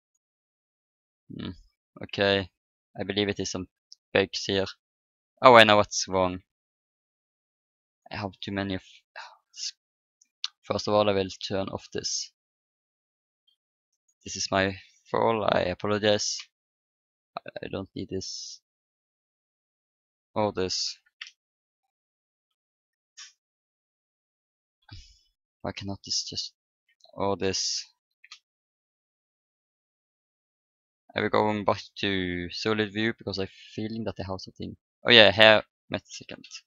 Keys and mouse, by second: 0.0 click, 0.6-1.8 drag, 2.1 click, 4.3 Tab, 4.9 click, 5.3 Tab, 6.1 Tab, 7.6 space, 8.4 space, 11.9-14.1 drag, 13.8 middle click, 13.9-15.5 right drag, 15.5 Delete, 18.2-20.9 right drag, 20.9 Delete, 22.2-23.5 middle drag, 23.5 click, 23.5 right click, 25.6 b, 27.3 Delete, 31.6-32.8 drag, 32.8 right click, 33.3 click, 36.1 a, 36.4 a.